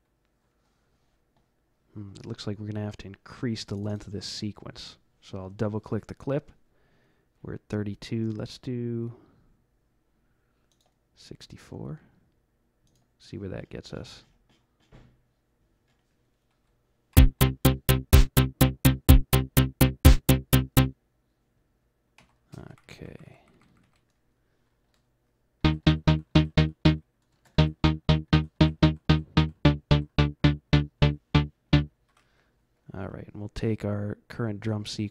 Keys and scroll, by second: 17.1 F11, 22.1 F12, 22.6 Up, 22.8 Up, 22.9 Up, 23.1 Up, 25.5-32.1 typing.